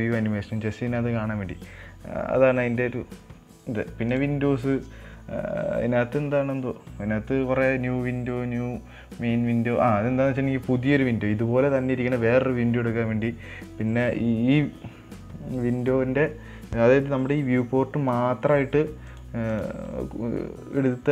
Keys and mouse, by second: 4.4-18.1 drag, 19.4 click, 20.0-21.1 drag.